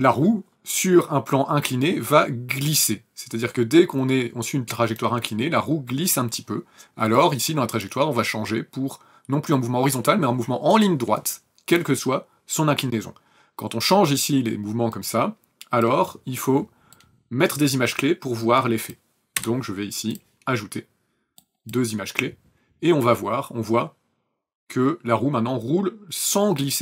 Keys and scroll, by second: 19.3 p.